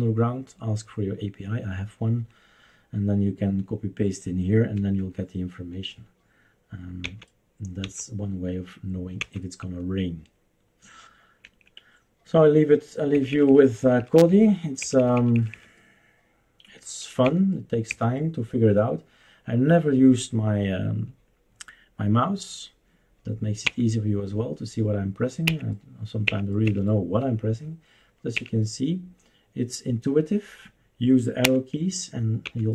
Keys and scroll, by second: 4.8 Escape, 7.0 Left, 7.8 Left, 9.2 Left, 11.4 Escape, 13.1 Up, 13.3 Up, 13.5 Up, 13.6 Up, 13.8 Up, 14.0 Up, 14.1 Up, 14.3 Up, 14.9 Up, 15.0 Up, 15.1 Up, 15.3 Up, 15.5 Up, 17.3 Down, 17.9 Down, 23.6 Left, 25.5 Up, 26.2 Up, 26.6 Up, 28.3 Up, 31.4 Left, 32.4 Left.